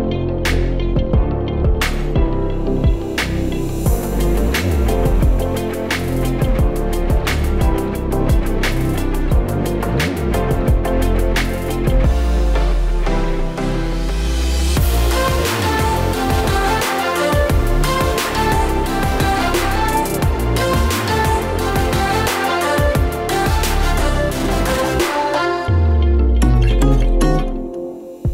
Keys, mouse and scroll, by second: 1.4 click, 3.5 click, 7.3 click, 13.6 click, 14.0 click, 19.2 click.